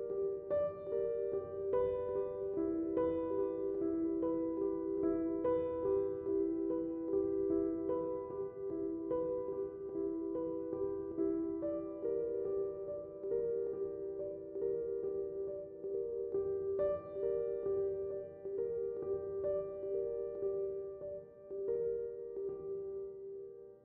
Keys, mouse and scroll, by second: 20.4 space, 20.6 click, 20.8 space, 21.2-22.5 ctrl+drag.